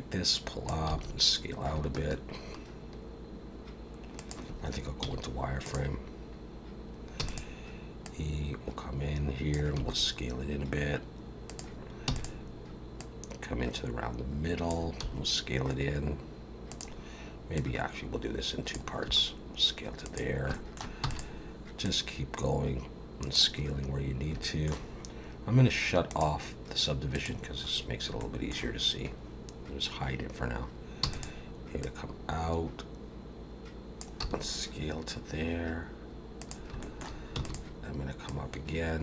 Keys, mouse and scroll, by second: 0.9 s, 5.0 z, 7.2 e, 8.0 click, 9.7 s, 12.1 e, 13.0 click, 15.0 s, 17.5 click, 19.0 s, 20.5 shift+middle click, 21.0 e, 21.8 click, 24.0 scroll down 1, 24.4 shift+middle click, 26.1 click, 27.1 click, 27.7-28.1 scroll up 2, 28.2 shift+middle click, 31.0 e, 31.8 click, 34.2 s, 36.8 shift+middle click, 37.3 e, 38.2 click.